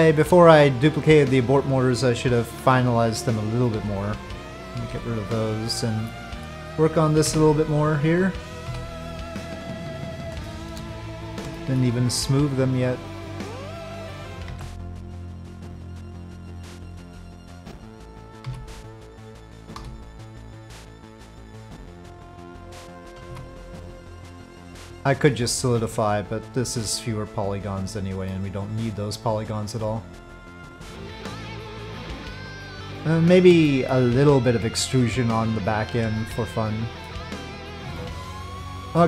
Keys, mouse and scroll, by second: 3.7 Delete, 4.7 Delete, 5.1 click, 6.0-6.4 middle drag, 9.8-10.2 middle drag, 10.4 shift+middle click, 11.5 shift+middle drag, 12.0 click, 13.4 click, 14.1 middle click, 14.2 Tab, 14.3 click, 14.5 ctrl+b, 17.2 click, 18.4 3, 18.7 click, 19.7 i, 22.8 click, 23.3 e, 25.2 s, 28.4-32.4 drag, 32.4 middle click, 33.6 shift+middle drag, 35.4 click, 35.9 Tab, 36.5 click, 37.9-38.3 shift+drag, 38.9 middle click.